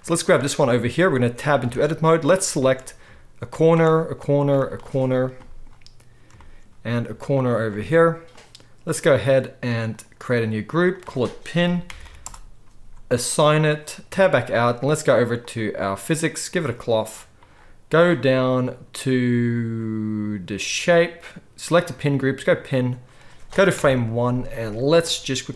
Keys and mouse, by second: 0.0-2.3 middle drag, 1.6 Tab, 2.3 click, 2.5-3.6 shift+middle drag, 3.6 shift+click, 3.7-7.3 shift+middle drag, 7.3 shift+click, 7.4-10.0 shift+middle drag, 10.0 click, 10.8 middle click, 10.9-15.5 drag, 14.0 Tab, 15.5-16.5 middle drag, 16.5-25.5 drag, 23.8 shift+Left.